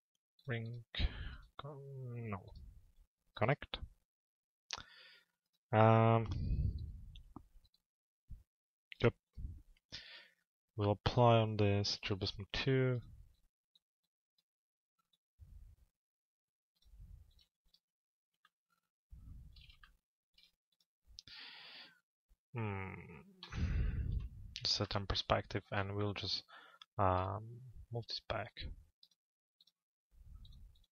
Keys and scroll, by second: 23.0 z.